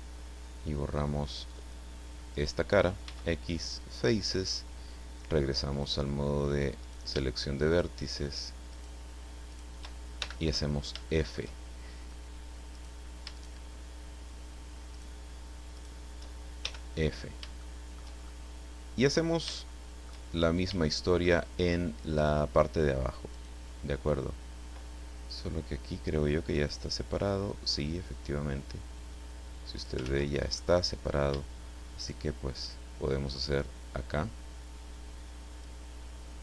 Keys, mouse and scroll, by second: 1.6 click, 2.3 right click, 3.0 x, 3.7 click, 5.7 click, 6.8 right click, 7.7 shift+right click, 8.7 shift+right click, 9.5 shift+right click, 10.2 shift+f, 10.7-11.1 shift+scroll down 1, 11.1 shift+middle click, 12.7 right click, 13.3 shift+right click, 14.9 shift+right click, 15.8 shift+right click, 16.6 shift+f, 17.2 scroll down 2, 17.6 shift+middle click, 18.2-19.5 shift+middle drag, 19.7 shift+middle click, 20.3-20.8 shift+scroll up 1, 20.8 shift+middle click, 22.0 right click, 23.3 right click, 26.6-30.0 drag, 30.0 ctrl+z, 30.5 ctrl+middle click, 32.0 shift+right click, 33.4-35.8 drag.